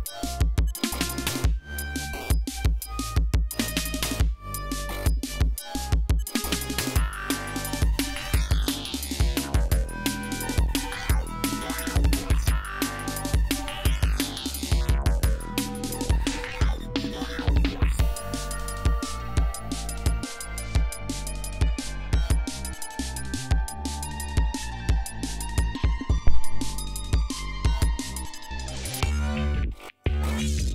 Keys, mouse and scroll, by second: 0.0 ctrl+scroll up 2, 8.1-8.9 ctrl+scroll down 4, 9.1 ctrl+scroll up 2, 10.6 ctrl+scroll down 2, 10.9 ctrl+scroll up 2, 14.9 scroll down 2, 15.6-16.3 scroll down 4, 16.5 ctrl+scroll up 2, 18.6 ctrl+scroll down 2, 19.1 ctrl+scroll up 2, 19.7 ctrl+d, 20.0 ctrl+scroll down 2, 20.5 ctrl+scroll up 2, 21.0 ctrl+scroll down 2, 21.3-22.3 ctrl+scroll up 4, 22.9 ctrl+scroll up 2, 23.6-24.0 ctrl+scroll up 2, 24.9 scroll up 2, 26.3 scroll up 2, 28.3-29.8 drag, 30.3 ctrl+scroll down 2, 30.6 ctrl+scroll up 2.